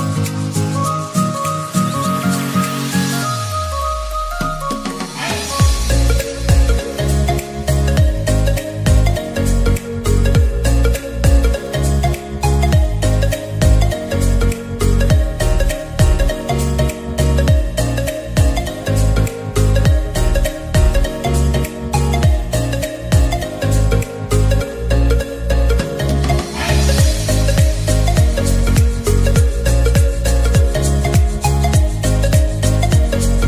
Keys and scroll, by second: 31.6 ctrl+z.